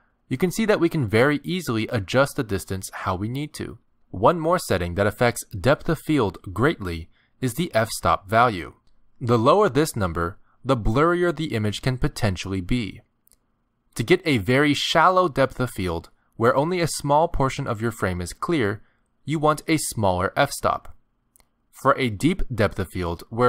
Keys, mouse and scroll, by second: 2.2 middle click, 4.3 click, 9.0 click, 14.7 click, 21.9 click.